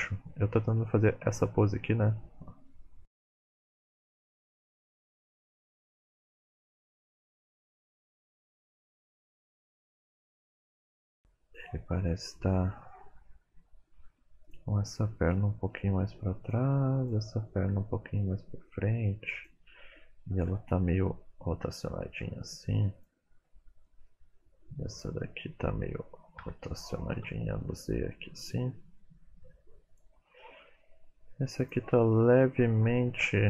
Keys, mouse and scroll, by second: 5.6 right click, 6.1 click, 7.2 g, 9.6 click, 10.5 KP_3, 11.8-13.2 scroll up 1, 14.4 click, 15.3 g, 17.0 click, 17.6 g, 20.4 KP_7, 21.6 r, 23.8 middle click, 24.9 click, 26.3 r, 30.3 middle click, 31.6 click, 32.8 KP_3.